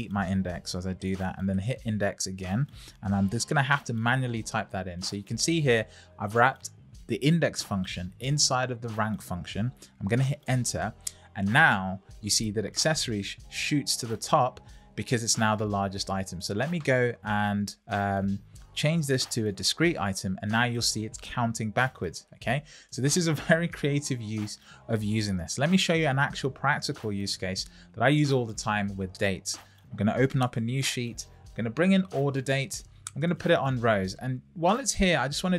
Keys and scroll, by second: 0.6 shift+i, 3.0-4.0 typing, 4.8 Right, 10.4 Return.